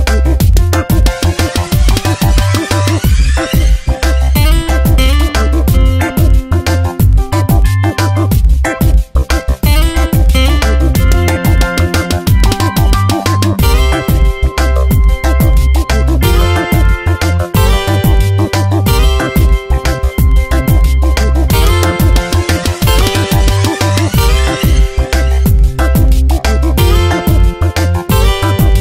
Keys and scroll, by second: 4.5 Return, 4.9 0, 6.9 ctrl+t, 17.6 Return, 21.7 ctrl+t, 25.6 ctrl+z, 26.0 Return, 26.4 v, 27.9 ctrl+t.